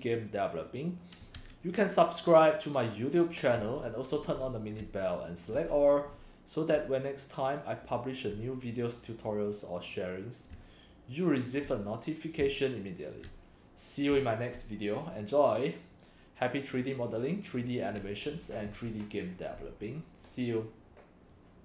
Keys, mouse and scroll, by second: 0.0-3.1 drag, 3.1 right click, 3.7 click, 4.2 click, 4.4-5.5 typing, 5.7-6.1 scroll down 5, 6.1 scroll, 6.2 scroll, 6.7 c, 6.9-8.4 c, 10.5 click, 10.5-14.4 typing, 12.6 click, 14.2 click, 14.5-17.5 drag, 17.6-18.8 drag, 19.0 click, 19.9 click.